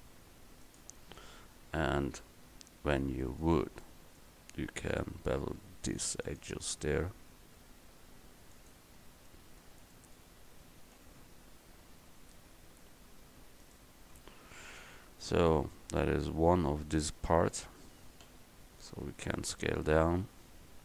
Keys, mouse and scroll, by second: 3.5-7.0 right drag, 7.6 click, 7.7 right click, 8.6 right click, 11.1 ctrl+b, 14.4 Tab, 16.1 KP_1, 18.3 s.